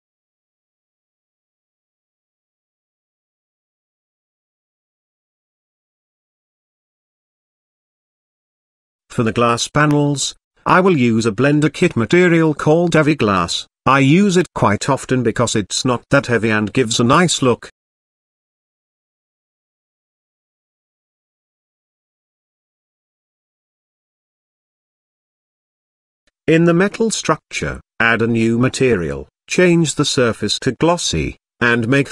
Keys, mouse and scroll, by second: 5.7 click, 8.7 n, 9.9 click, 11.1-11.8 drag, 12.4-17.4 drag, 13.1 e, 13.5 e, 14.9 s, 18.5-19.3 drag, 25.7 click, 27.5 click, 28.9 click, 30.9-32.1 drag.